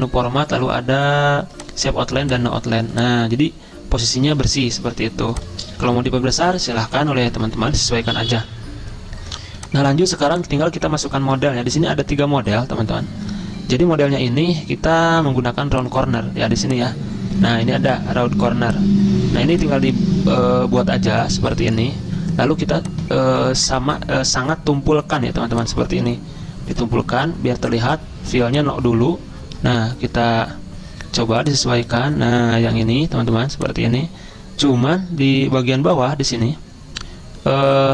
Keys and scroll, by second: 6.2 ctrl+a, 6.9 ctrl+], 7.0 ctrl+], 7.2 ctrl+], 12.5 ctrl+].